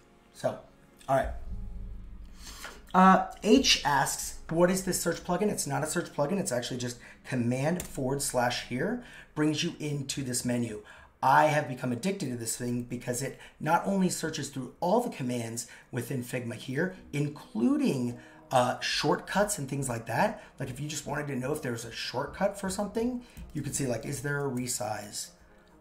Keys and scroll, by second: 7.8 super+/.